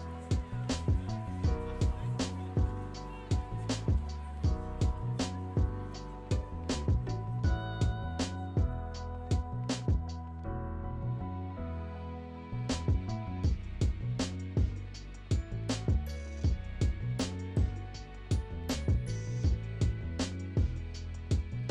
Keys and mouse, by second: 4.5 click, 6.2-8.6 drag, 9.2 click, 9.6-13.7 middle drag, 15.6-18.0 drag, 19.2 click, 20.3-21.7 drag.